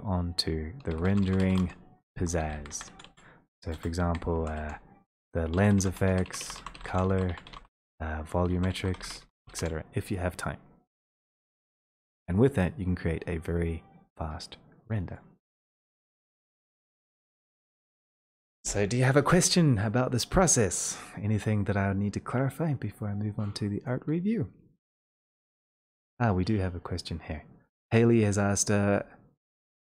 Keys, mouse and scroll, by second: 0.0-4.5 typing, 5.6-10.0 typing, 15.6 click, 23.9 click.